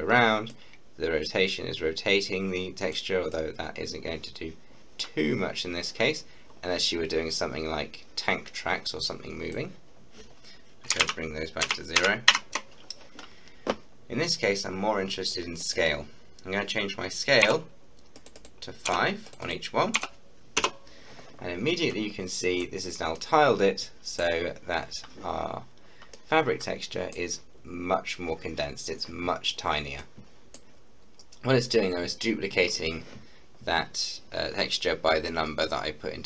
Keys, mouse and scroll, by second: 11.1 ctrl+z, 15.6 click, 17.5 5, 18.2 click, 18.9 5, 19.3 click, 19.9 5, 20.5 Return, 21.5-21.9 scroll up 1, 22.0 middle click, 22.8-23.2 scroll up 2, 23.2-24.5 middle drag, 24.5-25.5 scroll up 2, 25.5-26.2 scroll down 2, 26.2-27.5 middle drag, 27.5-28.0 scroll up 3, 28.7-30.0 scroll down 1, 30.0 middle click, 30.7-32.9 scroll up 1.